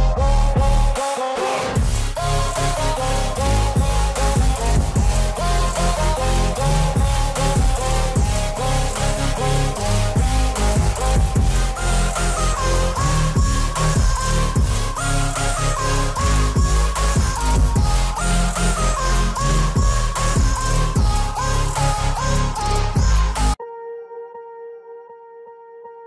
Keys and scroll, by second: 15.8 alt+w, 19.2 ctrl+a, 24.2 alt+w.